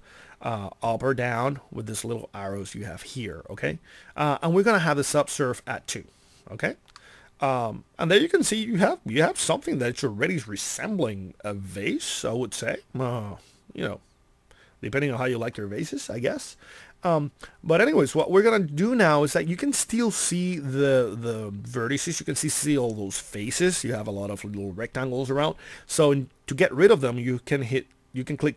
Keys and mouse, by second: 19.5-27.7 middle drag.